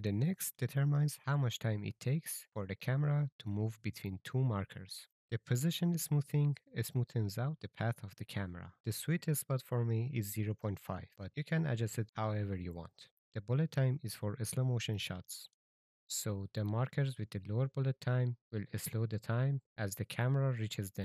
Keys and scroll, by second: 4.8-5.8 typing, 8.7 KP_0, 8.9 Return, 9.6 KP_0, 13.0-13.9 typing.